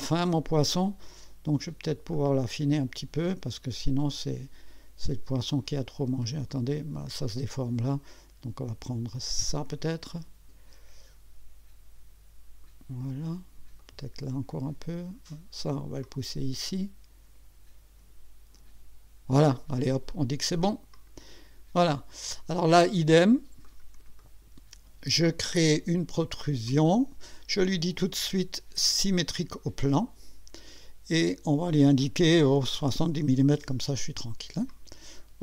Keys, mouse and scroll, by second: 2.1-7.6 drag, 9.7-12.9 drag, 13.8-15.3 drag, 16.0-18.3 drag, 20.9 click, 23.6-24.6 drag, 24.2 right click, 25.3 click, 26.7 click, 29.9 click, 31.2 click, 32.5-33.4 typing, 34.7 click.